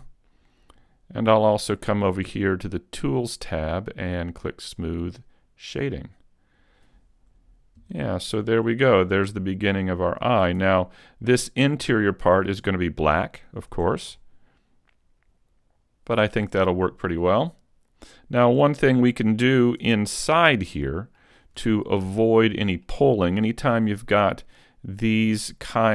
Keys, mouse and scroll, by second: 1.3 click, 3.2 click, 4.8 click, 6.0-6.5 scroll up 1, 6.5-7.9 scroll down 2, 7.9 KP_5, 8.5 middle click, 10.5 Tab, 11.7 scroll up 4, 13.0-13.7 scroll down 1, 13.7 Tab, 13.7-14.2 scroll down 2, 14.2 middle click, 16.4 scroll down 3, 16.8 middle click, 19.0 middle click, 19.8 Tab, 20.1-20.8 scroll up 3, 20.8 middle click, 20.8-21.4 scroll up 1, 21.4-21.8 scroll up 2, 21.7 shift+middle click, 22.3 middle click, 23.1-23.4 scroll up 1, 23.4 shift+middle click, 24.4 middle click, 24.9-25.5 scroll down 1.